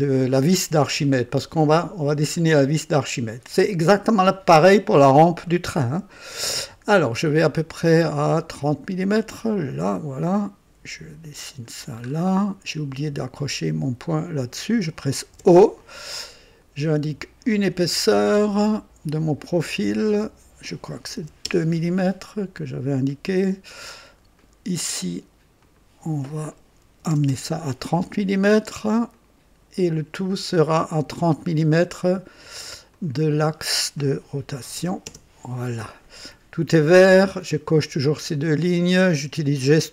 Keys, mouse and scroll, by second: 3.5 click, 9.4 click, 11.3 click, 12.1 scroll up 1, 12.4 right click, 13.5 click, 14.4 click, 15.3 o, 18.1 click, 20.1 click, 21.2 KP_2, 21.4 KP_Enter, 23.1-24.0 drag, 24.4 click, 25.6 click, 26.8 KP_3, 27.0 KP_0, 27.3 Return, 29.1 click, 29.3 typing, 30.7 click, 32.9 click, 34.5 KP_3, 34.7 KP_0, 35.0 Return.